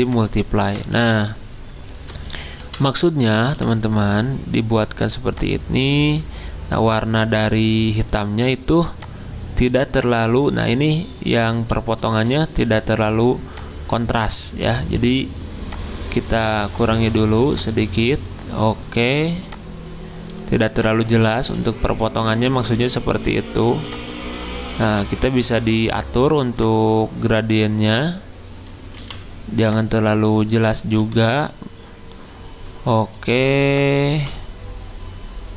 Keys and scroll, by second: 2.6 v, 24.8 g, 29.0 v, 31.0 g, 33.3 g.